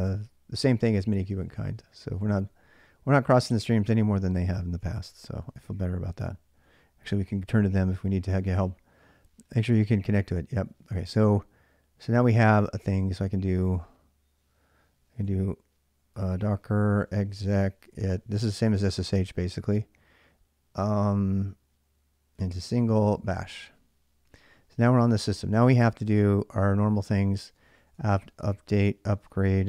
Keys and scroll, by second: 3.3 ctrl+a, 3.4 ctrl+a, 4.0-5.7 typing, 6.1 ctrl+a, 6.3 ctrl+a, 10.3 ctrl+a, 14.7-18.2 typing, 21.9-25.1 typing, 26.8-29.6 typing.